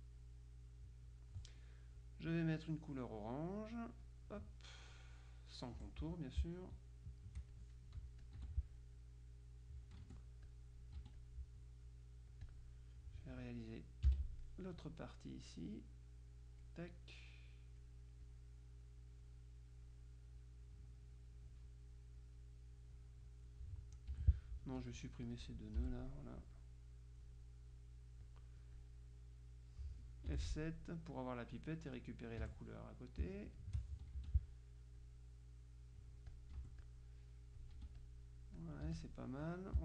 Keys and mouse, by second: 0.3-1.8 drag, 4.1 click, 5.9 F1, 7.2 shift+click, 8.3 click, 8.5 F2, 9.0-10.3 drag, 10.1 F1, 10.5 click, 11.1 F2, 11.3 click, 12.5 click, 14.1 F6, 15.6-17.2 drag, 17.6 click, 19.1 click, 20.5-23.0 drag, 24.2 F2, 24.7 click, 25.9 Delete, 26.7-27.8 drag, 30.4 F7, 31.6 click, 32.5 F1, 33.7 shift+click, 34.3 shift+F2, 35.1-36.9 drag, 36.6 F1, 37.9 F2, 38.1-39.6 drag, 38.9 F1.